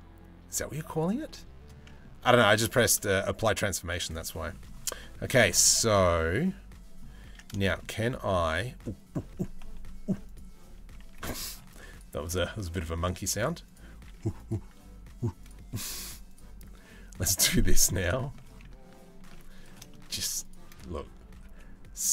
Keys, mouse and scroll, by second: 1.5 middle click, 2.9 Tab, 3.3 Tab, 3.8 middle click, 4.6 middle click, 5.3 shift+middle click, 5.7 middle click, 6.9 Tab, 8.2 Tab, 9.9 click, 11.0 Tab, 11.1 ctrl+r, 13.8 ctrl+r, 15.7 ctrl+r, 17.2 middle click, 17.7 shift+middle click, 18.8 ctrl+r, 19.5 shift+middle click, 20.9 g.